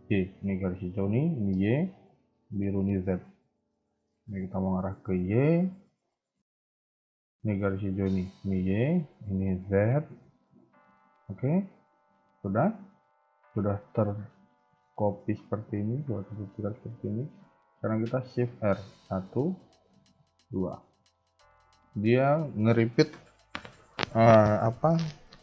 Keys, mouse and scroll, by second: 18.9 shift+r.